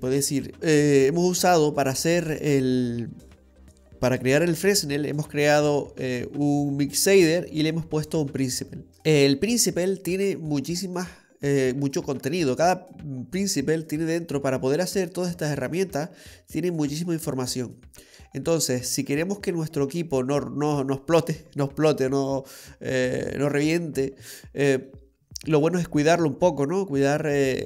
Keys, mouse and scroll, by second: 0.6-1.6 scroll up 11, 1.5 middle click, 2.0-2.9 scroll up 3, 2.9 middle click, 3.6-4.5 scroll up 4, 5.2-5.6 scroll down 3, 5.6 middle click, 8.9-9.7 scroll down 2, 9.7-10.7 scroll down 4, 10.1 middle click, 23.7 scroll down 2, 24.4 middle click, 26.7-27.6 scroll up 3.